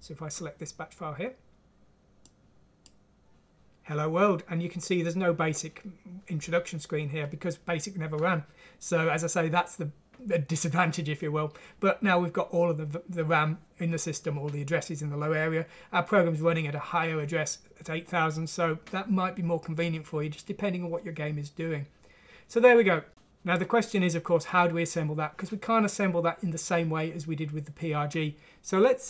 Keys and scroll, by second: 23.1 alt+Tab.